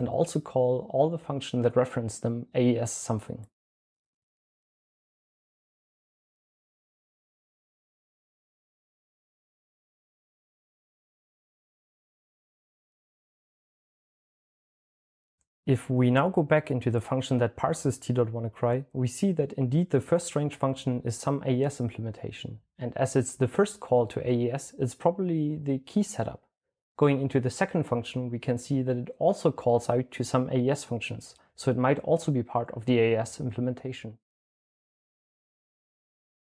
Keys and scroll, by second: 0.4 typing, 2.3-3.2 typing, 3.2 Return, 5.1-6.1 typing, 5.9 Return, 7.9-8.9 typing, 8.9 Return, 10.5-11.2 typing, 31.4-34.4 typing, 36.3 typing.